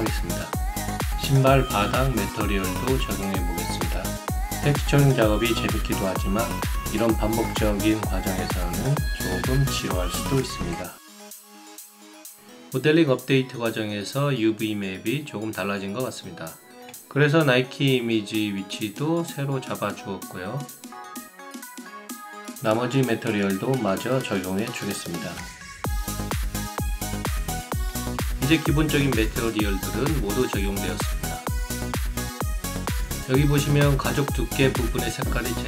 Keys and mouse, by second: 1.5 alt+middle click, 2.3 click, 3.6 click, 4.0 click, 4.3 alt+click, 4.5 alt+middle click, 4.6 alt+click, 5.5 click, 7.1 click, 7.7 click, 9.9-10.9 alt+drag, 11.2 right click, 11.5 click, 12.3 right click, 12.7 alt+shift+click, 13.2 alt+click, 13.2 alt+right click, 13.3 alt+middle click, 13.6 alt+middle click, 14.0 click, 18.8 alt+click, 19.8 click, 20.6 alt+click, 21.0 click, 21.5 click, 21.7 alt+right click, 21.8 alt+click, 22.5 alt+click, 22.8 click, 23.3 click, 24.3 click, 25.9 click, 27.6 alt+click, 27.8 alt+right click, 27.9 alt+click, 28.3 alt+right click, 28.4 alt+click, 28.8 alt+middle click, 28.9 alt+right click, 29.2 alt+click, 29.7 alt+middle click, 30.4 alt+click, 30.9 alt+shift+right click, 31.2 alt+shift+right click, 31.3 alt+click, 31.6 alt+click, 31.7 alt+middle click, 31.8 alt+click, 32.6 alt+shift+right click, 32.8 alt+right click.